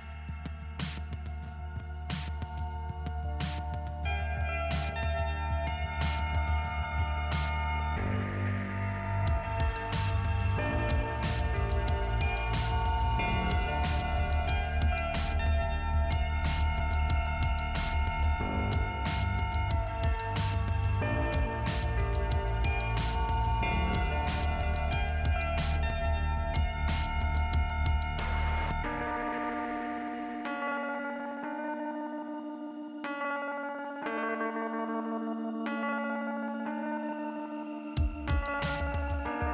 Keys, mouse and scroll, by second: 2.0-3.1 scroll up 2, 4.4 click, 5.2 right click, 6.1 click, 7.7 click, 8.3 click, 8.4 click, 9.4 click, 10.3 click, 11.5 click, 12.3 click, 14.2 click, 15.0 click, 16.1 click, 16.9 click, 17.8 click, 18.9 click, 19.6-19.9 scroll down 2, 20.9 scroll up 2, 21.7 scroll down 2, 22.3-23.2 scroll up 2, 23.7 middle click, 25.1 click, 25.8 click, 28.4 click, 30.3 click, 37.2 click, 37.5 click, 38.9 click.